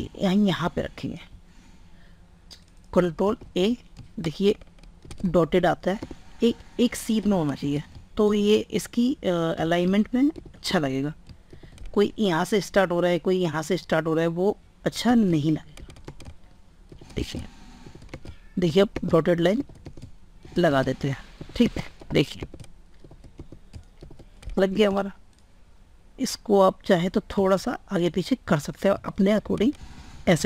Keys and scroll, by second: 3.1 ctrl+a, 24.3 ctrl+space.